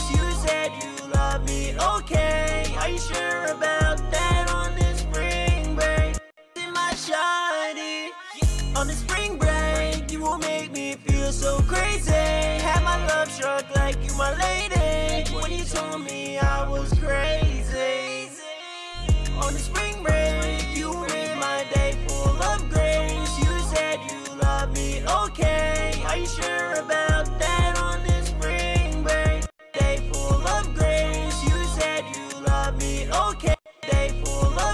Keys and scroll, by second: 1.6 super+Tab, 24.8 b, 25.7 ctrl+shift+Page_Down, 25.8 ctrl+shift+Page_Down, 28.8 space, 29.0 space, 34.1 super+s.